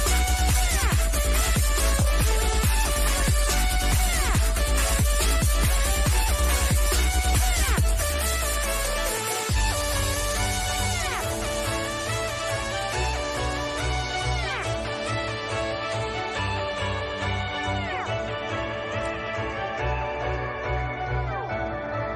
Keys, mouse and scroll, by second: 0.2 scroll down 1, 0.7 middle click, 1.3 scroll down 1, 2.1-4.4 shift+middle drag, 4.4 scroll up 1, 6.2-8.1 shift+middle drag, 8.1 scroll down 1, 8.7 middle click, 9.5 scroll down 1, 10.0-12.4 middle drag, 12.4 click, 13.7 scroll up 1, 18.0 click.